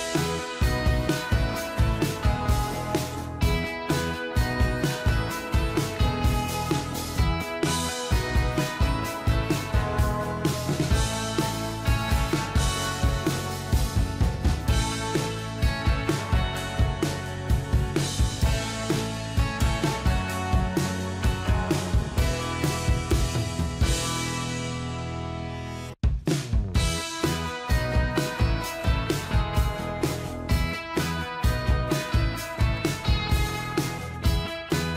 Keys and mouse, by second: 3.7 Left, 19.0 click, 23.7-26.8 typing, 28.5 o, 29.1 space, 30.7 5, 31.2 shift+5, 32.4 ctrl+a, 34.0 double click.